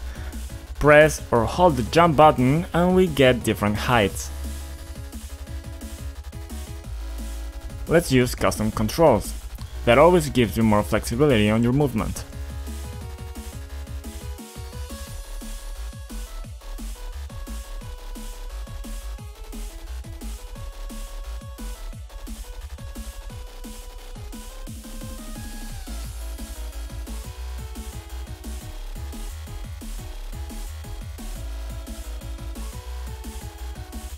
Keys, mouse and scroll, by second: 4.9 click, 6.1 click, 7.2 click, 7.8 click, 8.8 click, 9.5 right click, 10.1 click, 11.1 click, 12.0 double click, 12.8 click, 12.9 double click, 13.5 double click, 14.2 a, 14.7 click, 15.4 click, 16.4 ctrl+click, 17.1 ctrl+click, 17.7 click, 17.8 click, 18.3 double click, 18.6 typing, 19.1 click, 19.6 click, 20.2 click, 21.1 click, 22.8 k, 23.8 click, 24.2 click, 24.8 click, 26.0 click, 26.7 click, 27.0 double click, 27.9 click, 28.9 double click, 29.9 ctrl+click, 30.6 double click, 31.2 double click, 31.7 click, 32.1 click, 32.6 ctrl+click, 33.1 click, 33.6 double click, 33.6-34.1 scroll down 2.